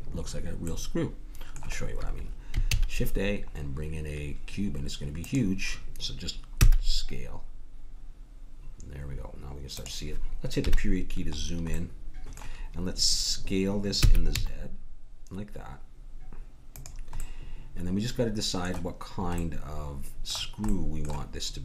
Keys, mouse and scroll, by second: 2.7 shift+a, 6.7 s, 10.7 KP_Decimal, 11.3-13.8 middle drag, 14.0 s, 17.2 middle click, 18.2-21.6 middle drag.